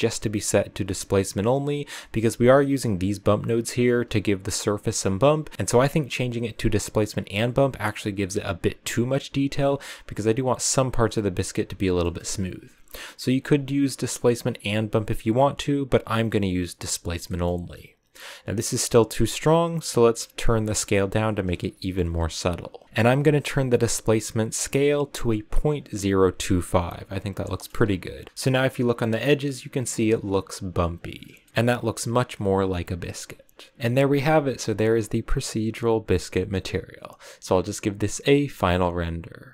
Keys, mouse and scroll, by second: 1.8 middle click, 2.7 click, 3.6 click, 5.5-16.7 drag, 17.5 middle click, 17.9-18.6 scroll up 1, 18.6-19.5 scroll up 1, 19.5-21.8 shift+drag, 21.8 middle click, 22.2-22.7 scroll up 1, 22.7 click, 23.1 click, 27.3 shift+middle click, 27.7-28.8 scroll up 5, 28.4 shift+middle click, 31.0 scroll down 5, 31.4-32.7 shift+middle drag, 32.7-33.7 scroll down 1, 33.7-39.5 middle drag.